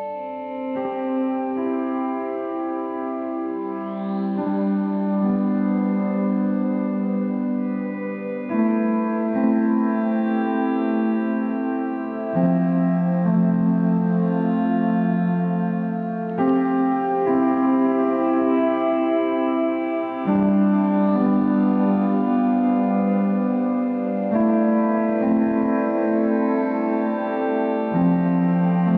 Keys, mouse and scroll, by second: 0.9 middle click, 1.8-7.4 right drag, 7.4-10.6 middle drag, 11.2-12.5 right drag, 12.5-14.2 middle drag, 14.2-15.8 drag, 15.8-18.8 middle drag, 19.7 click, 20.7-21.0 scroll up 3, 21.0-24.7 middle drag, 24.7-28.7 drag, 28.7-28.9 scroll up 2.